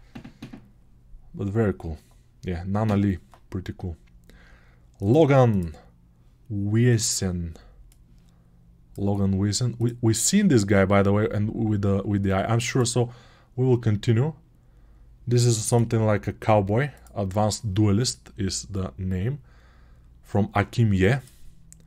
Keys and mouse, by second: 21.2 right click.